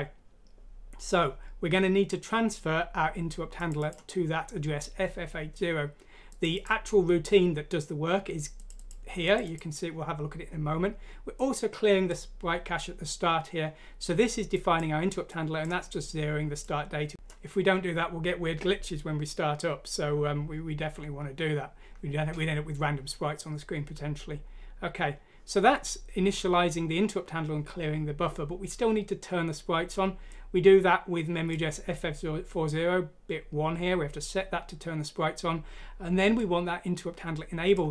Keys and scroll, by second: 17.1 ctrl+z.